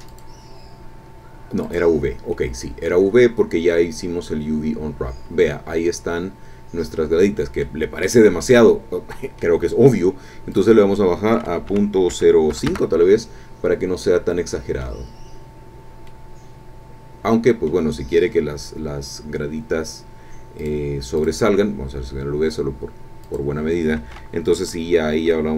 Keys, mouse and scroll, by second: 0.1 click, 1.6 click, 2.3-7.7 middle drag, 7.7 scroll up 2, 8.4-9.6 drag, 10.5 click, 11.6 KP_Decimal, 12.1 KP_0, 12.5 KP_5, 12.6 KP_Enter, 13.5 scroll down 1, 14.1 click, 15.2-15.6 scroll up 1, 15.6 scroll down 1, 16.0-17.9 drag, 20.6 click, 21.1 click, 23.2 click.